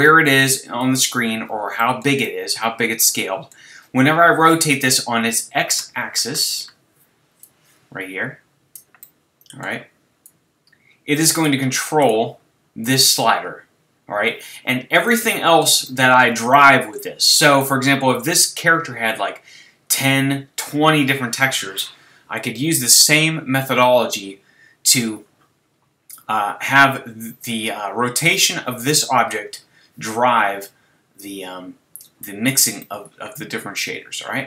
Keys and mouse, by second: 1.7 click, 1.9 click, 2.6 click, 7.4-9.1 drag, 10.2-12.0 drag, 12.0-12.8 right drag, 12.8-14.7 drag, 15.1 middle drag, 15.5-16.5 middle drag, 16.9-20.6 middle drag, 32.8-34.4 middle drag.